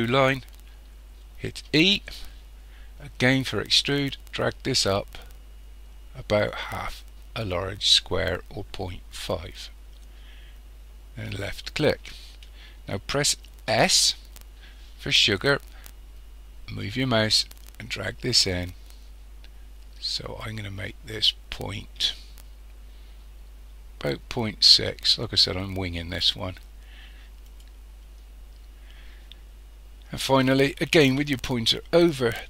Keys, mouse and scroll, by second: 1.7 e, 11.5 click, 13.7 s, 27.6 click.